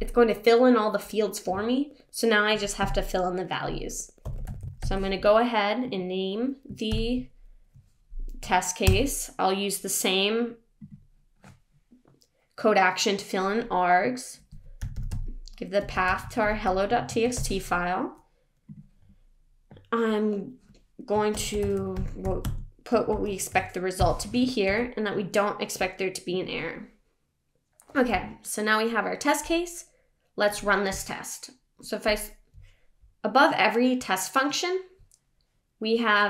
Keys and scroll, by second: 6.9 super+., 24.6 super+s.